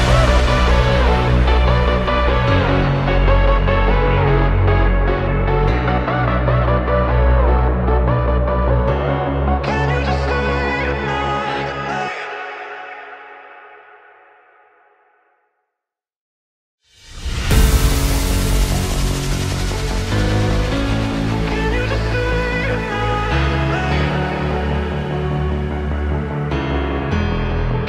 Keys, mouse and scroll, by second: 0.8 KP_7, 1.4-2.1 shift+middle drag, 2.1 g, 3.1-3.7 middle drag, 3.7 r, 5.2-7.4 middle drag, 7.4 r, 10.5 middle click, 10.8 click, 11.2-11.6 middle drag, 11.6 KP_1, 11.9-12.4 scroll down 2, 12.4-13.0 shift+middle drag, 13.0 click, 13.3-13.8 scroll up 1, 13.8-14.4 shift+middle drag, 14.4 click, 15.0 shift+click, 16.0 click, 16.8 g, 17.8 g, 22.1 click, 22.7 shift+click, 23.2 shift+click, 23.8 click, 24.7 r, 26.0 shift+click, 26.6 shift+click, 27.0 shift+click, 27.6 shift+click.